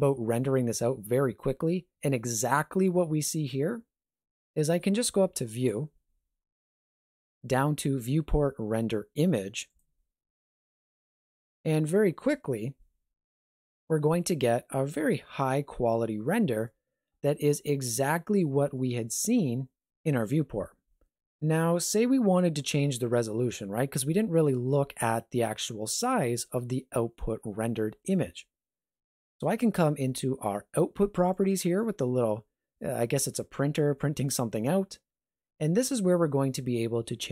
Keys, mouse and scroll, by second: 5.5 click, 31.3 click.